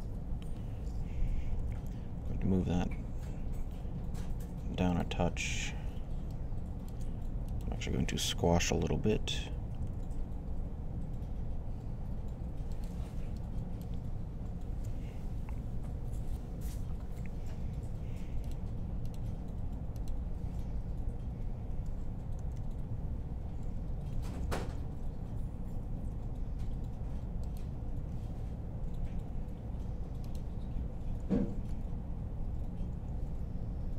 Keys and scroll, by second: 1.1-1.9 typing, 9.3-10.2 typing, 22.2 alt+r, 23.8-24.8 typing, 31.5 r.